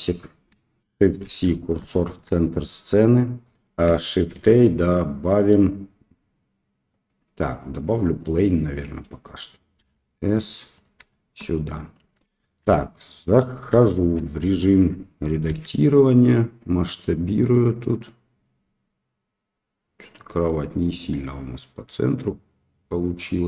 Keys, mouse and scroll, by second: 1.2 shift+c, 1.9 shift+middle drag, 4.3 shift+a, 9.8 s, 11.1 shift+middle click, 12.3 shift+middle click, 13.8 shift+middle click, 14.4 Tab, 15.4 s.